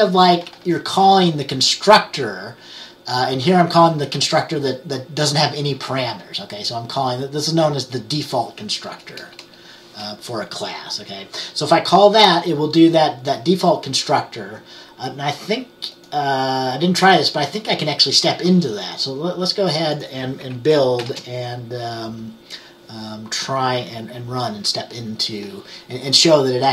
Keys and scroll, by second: 9.3 BackSpace, 9.5 BackSpace, 21.1 ctrl+b.